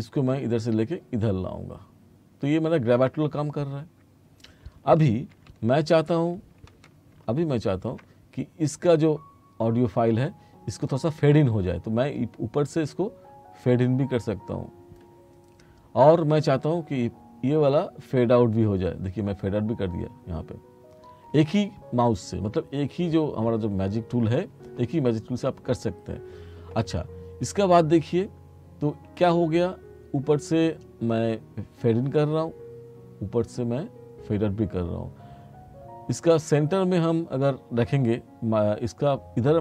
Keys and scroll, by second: 5.6 t.